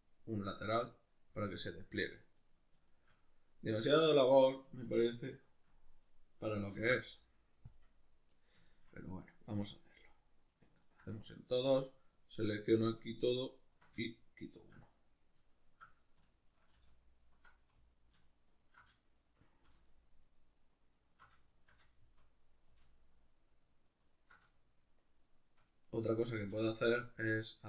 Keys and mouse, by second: 6.8 ctrl+e, 9.8 right click, 10.0 middle click, 10.8 ctrl+right click, 11.9 alt+shift+right click, 12.4 alt+shift+right click, 12.9 alt+shift+right click, 13.6 alt+shift+right click, 14.5 shift+right click, 14.9-17.2 middle drag, 17.2 alt+shift+right click, 18.3 alt+shift+right click, 19.1 shift+right click, 19.9 alt+shift+right click, 20.2 alt+shift+right click, 20.9 alt+shift+right click, 21.5 shift+right click, 22.0-23.9 shift+middle drag, 23.9 alt+shift+right click, 25.0 shift+right click, 25.3 shift+right click, 25.7 middle click, 26.6 alt+shift+right click, 27.3 alt+shift+right click.